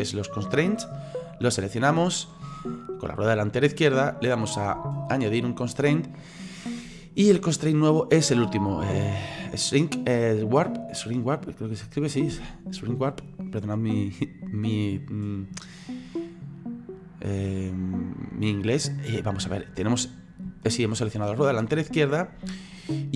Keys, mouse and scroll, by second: 1.3 click, 5.0-10.9 drag, 16.1-20.0 middle drag, 20.0-20.7 scroll up 3, 20.7-23.1 shift+middle drag.